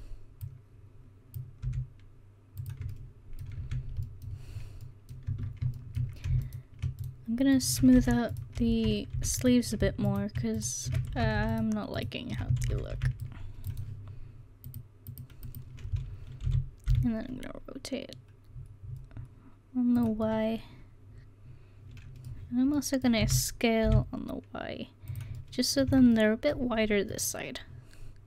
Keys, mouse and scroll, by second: 0.4 click, 1.6 s, 3.6 Tab, 5.3 Tab, 8.0 c, 9.2 ctrl+z, 11.2 ctrl+z, 12.6 ctrl+z, 12.9 c, 16.5 r, 20.5 middle click, 21.8 middle click, 22.8 middle click, 23.2 s, 24.8 click, 25.9 Tab.